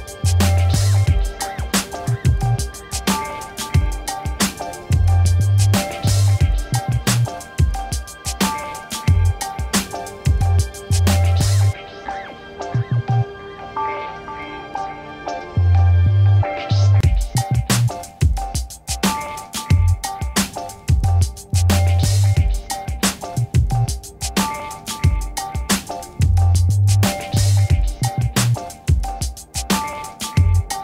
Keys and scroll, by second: 3.4 g, 25.1 ctrl+alt+shift+s.